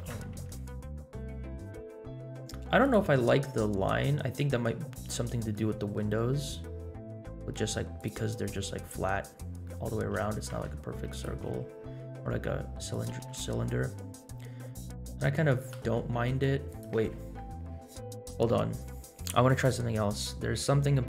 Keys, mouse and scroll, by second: 0.0 g, 4.1 middle click, 4.9-5.2 scroll up 2, 5.5 middle click, 6.1 scroll up 2, 6.4-6.8 scroll down 3, 7.3 r, 9.3 scroll down 1, 9.6 middle drag, 10.1 g, 12.2 r, 13.1 g, 15.8 r, 19.4 click, 20.4 middle click.